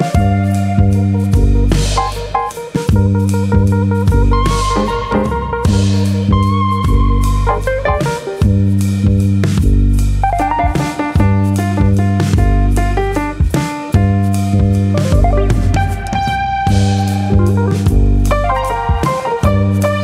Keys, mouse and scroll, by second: 1.4 click, 1.8 alt+click, 5.1 ctrl+KP_Add, 5.4 ctrl+KP_Add, 6.8 click, 7.8 click, 10.9 alt+click, 11.3 click, 12.1-12.8 scroll down 3, 12.3 middle click, 14.0-14.6 scroll up 3, 14.3 middle click, 14.6 shift+middle click, 14.8 middle click, 15.1-15.7 scroll up 1, 15.7 alt+click, 15.7 scroll up 1, 16.0 middle click, 17.0 click, 18.3 ctrl+z, 19.4 middle click, 19.5 click.